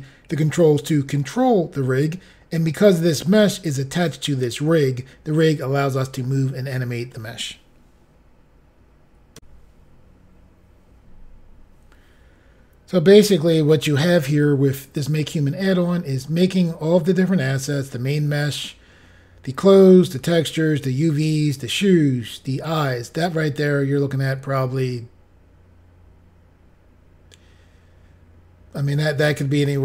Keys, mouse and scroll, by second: 9.4 Insert.